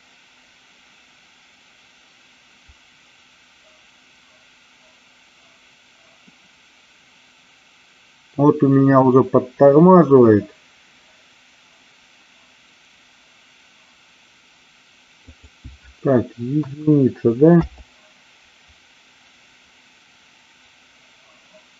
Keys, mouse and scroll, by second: 15.1-21.7 drag.